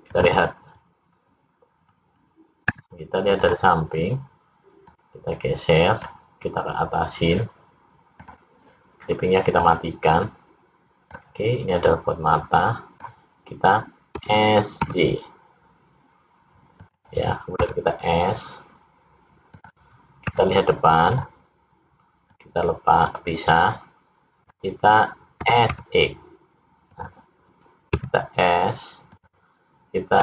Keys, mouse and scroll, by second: 0.1 click, 4.9 click, 8.3 click, 9.7 click, 11.8 click, 14.2 s, 17.6 s, 20.3 `, 22.4 click, 25.4 s, 27.9 s.